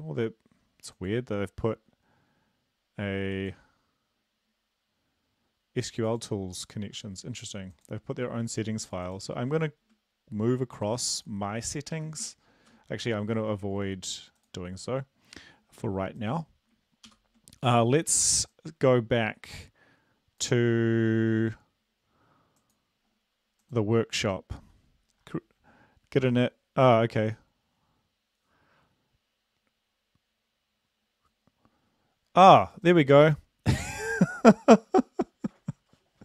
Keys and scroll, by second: 18.2 ctrl+l.